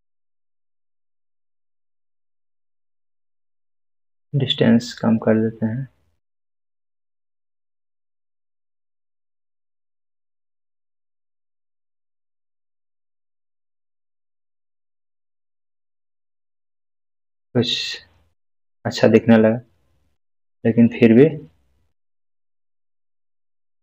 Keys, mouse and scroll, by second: 0.2-2.7 middle drag, 3.8-12.2 drag, 13.5-14.4 scroll down 2, 14.4-15.2 scroll down 1, 15.2-19.3 middle drag, 20.2-20.5 scroll down 1, 20.9-22.7 middle click, 22.7-23.1 scroll up 1, 23.6-23.8 middle drag.